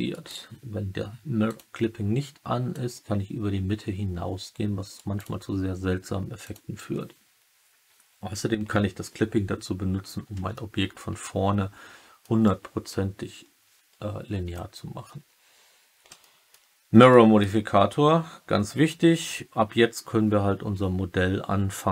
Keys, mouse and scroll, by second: 0.0 middle click, 1.4 click, 2.7-4.9 drag, 4.9 middle click, 5.1 click, 6.3 click, 10.5-12.2 alt+middle drag, 14.4 alt+middle click, 16.1 alt+middle click, 17.0 alt+middle click.